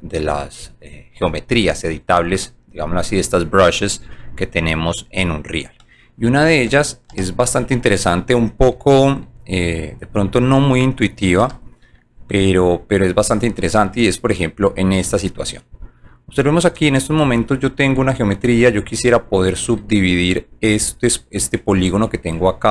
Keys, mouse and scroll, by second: 1.3 alt+click, 1.7 alt+middle click, 4.0-4.3 scroll up 2, 5.1 alt+click, 5.8 alt+middle click, 7.1 alt+j, 7.8 alt+middle click, 8.1 alt+middle click, 9.3 alt+right click, 10.3 middle click, 12.0 alt+middle click, 12.5 alt+middle click, 13.9 alt+middle click, 14.5 alt+middle click, 15.7 alt+click, 16.3 alt+click, 17.4 alt+middle click, 18.7 alt+click, 19.3 alt+middle click.